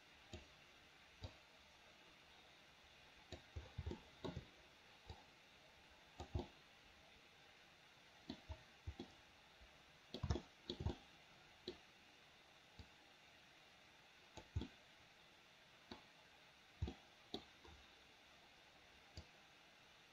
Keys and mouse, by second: 0.0 click, 1.5-3.6 drag, 4.1 shift+middle click, 5.3-6.5 drag, 6.6-7.8 middle drag, 7.8 click, 7.8 right click, 8.3 middle click, 9.3-10.4 middle drag, 10.6 shift+middle click, 11.1 middle click, 13.0-14.6 drag, 14.8-16.1 middle drag, 17.1 middle click, 17.4 click, 17.4 right click, 19.5-20.1 drag.